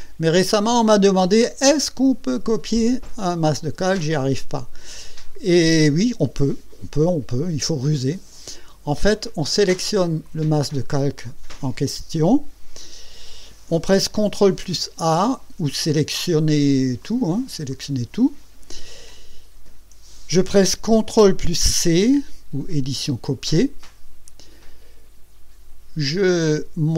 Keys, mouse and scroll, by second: 10.2 click, 15.4 ctrl+a, 17.0 click, 17.7 click, 22.7 ctrl+c.